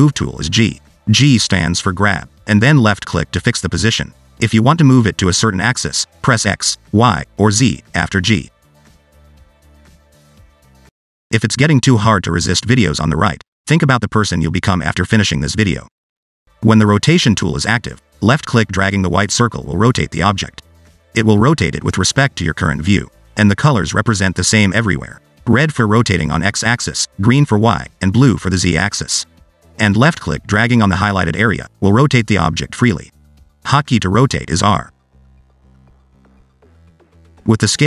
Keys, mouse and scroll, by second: 1.2 click, 2.2 g, 5.1 g, 17.5 click, 19.2 click, 21.6 middle click, 22.1-22.4 scroll up 1, 22.4 click, 23.5 middle click, 24.1 middle click, 24.3 click, 25.0 scroll down 1, 25.1 middle click, 27.3 click, 28.3 click, 29.3 click, 31.0 click, 34.2 click, 34.6 r, 37.1 ctrl+z.